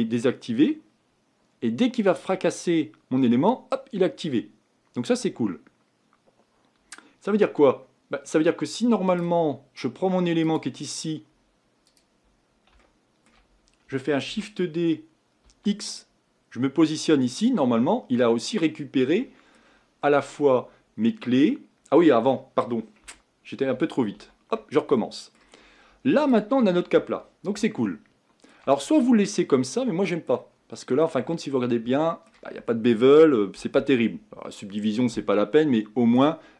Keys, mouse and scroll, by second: 10.6 click, 11.0-12.0 scroll up 4, 12.0 click, 12.8-14.3 shift+middle drag, 14.3 shift+d, 18.3-20.7 middle drag, 20.7-21.9 scroll up 5, 21.9-23.7 scroll down 7, 23.7 ctrl+z, 24.2 ctrl+z, 25.0 middle click, 25.7-26.4 scroll up 4, 26.4 click, 27.6-29.0 shift+middle drag, 29.0-29.7 scroll up 4, 29.7-31.4 middle drag, 31.4-31.9 scroll up 2, 36.1-36.5 shift+middle drag.